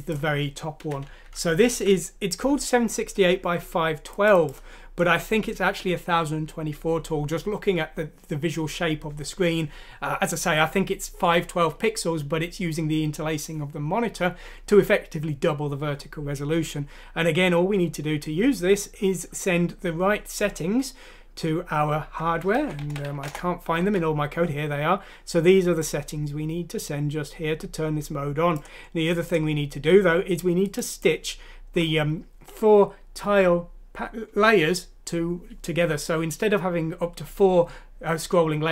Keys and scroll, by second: 1.3 Home, 1.9 ;, 22.7-23.6 typing, 23.8 Escape, 25.3 typing.